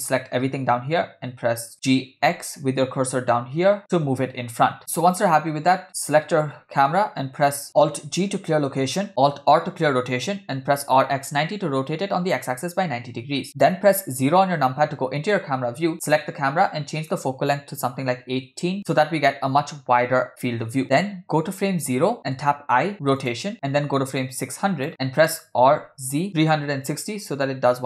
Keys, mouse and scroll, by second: 0.5 a, 1.7 g, 5.0 click, 7.7 scroll up 1, 8.4 alt+g, 9.5 alt+r, 10.6 r, 13.5 KP_0, 16.0 click, 17.0-18.5 drag, 21.6 click, 22.4 i, 24.3 click, 24.9 Right, 25.8 r.